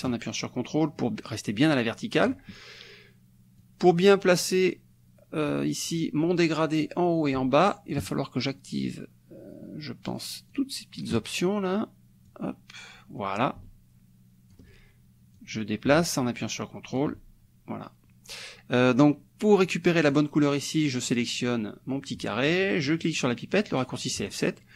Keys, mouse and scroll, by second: 3.6-8.0 drag, 10.2 click, 10.5 click, 11.0 click, 12.3-14.7 drag, 15.4-17.2 drag, 20.1 click, 21.2 click, 24.3 click.